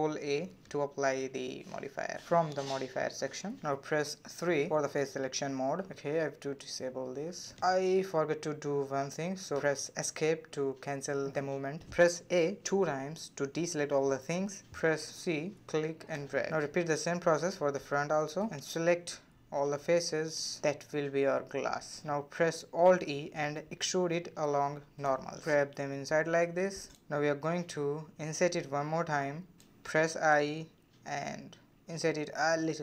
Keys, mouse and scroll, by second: 0.0-0.5 drag, 0.5 middle click, 1.2 Tab, 1.6 middle click, 2.2 scroll up 1, 2.2 3, 2.4 click, 2.6 shift+click, 2.9-4.0 middle drag, 4.0 g, 6.6 click, 7.1 g, 8.8 middle click, 9.6 c, 12.0 a, 12.1 a, 13.3 3, 14.1 c, 16.8 middle click, 17.6 scroll down 1, 17.8 middle click, 18.0 c, 21.1-22.3 middle drag, 22.4 alt+e, 25.5 scroll down 1, 25.5 middle click, 26.4-27.0 scroll up 3, 27.0-28.0 middle drag, 28.0-28.4 scroll down 2, 28.4-29.4 middle drag, 29.4-31.2 scroll up 2, 32.6 middle click.